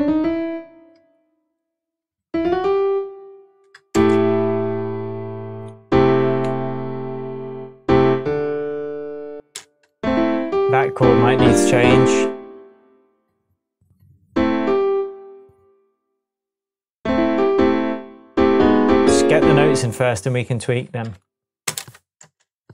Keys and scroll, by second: 3.9 space, 6.4 -, 9.3 space, 21.6 space.